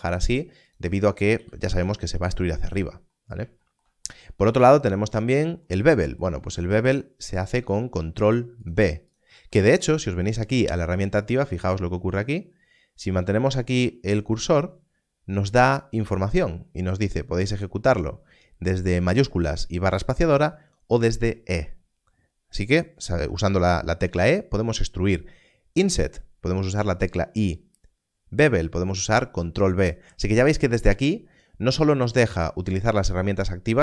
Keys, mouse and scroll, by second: 1.3 click, 3.0 e, 7.3 click.